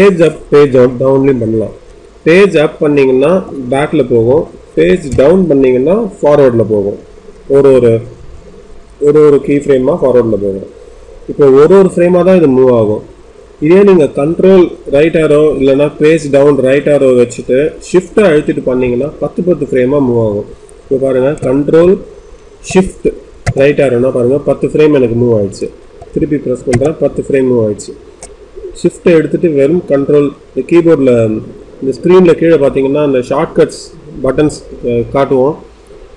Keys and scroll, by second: 1.8 Page_Up, 5.0 Page_Down.